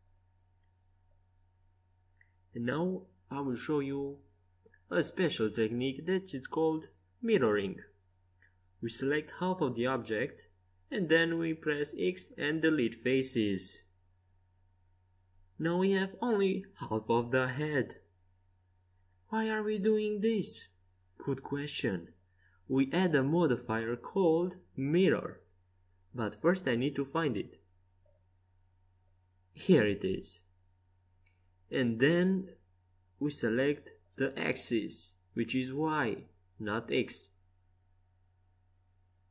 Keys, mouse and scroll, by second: 1.2 c, 11.6 x, 14.5 Tab, 15.0 right click, 15.4 Tab, 16.5 z, 16.9-18.6 drag, 18.6 Tab, 18.7 click, 20.0-21.3 drag, 21.8-23.3 middle drag, 23.3-25.6 drag, 34.8-36.8 drag, 37.3-39.3 drag.